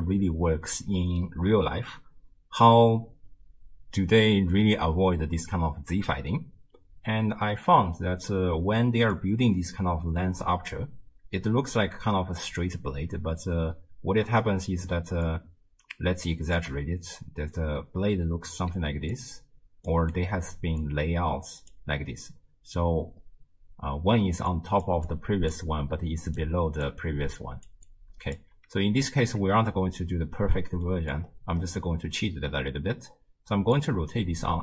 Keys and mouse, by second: 8.5-9.2 middle drag, 12.6-16.8 d, 15.3-16.6 drag, 18.7 d, 19.2 click, 19.9 d, 20.0 d, 20.4 d, 20.8 click, 21.7 d, 21.8 d, 21.9 d, 24.2-28.5 typing, 24.5 click, 25.1 click, 26.4 click, 27.4 click, 27.9 click, 30.9 middle click, 33.8-34.6 shift+drag.